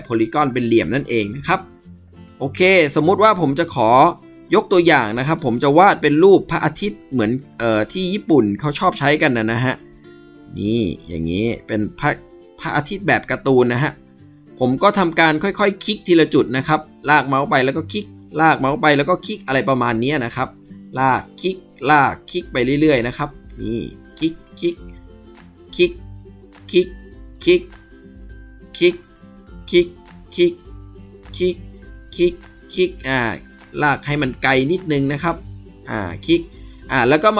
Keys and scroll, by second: 1.1 ctrl+d.